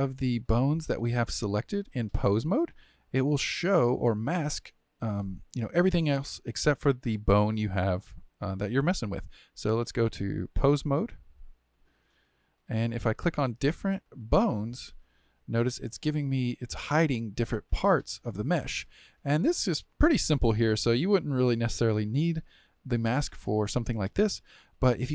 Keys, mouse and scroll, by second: 0.0 click, 9.8-12.8 drag, 13.2 click, 14.1 click, 14.9 click, 15.9-16.9 shift+middle drag, 16.9 click, 17.7 click, 18.3 click, 18.8-20.4 shift+middle drag, 20.4 click, 21.0-24.5 middle drag, 24.5 click.